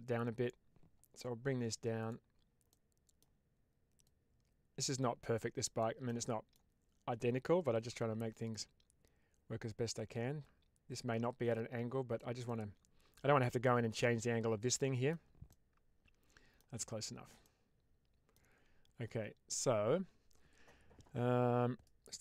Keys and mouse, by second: 2.7 middle click, 2.7 typing, 4.4-6.0 drag, 6.0 middle click, 7.7 typing, 8.3 click, 9.5-12.0 drag, 12.3 middle click, 14.7 middle click, 15.4-16.5 middle drag, 17.3 middle click.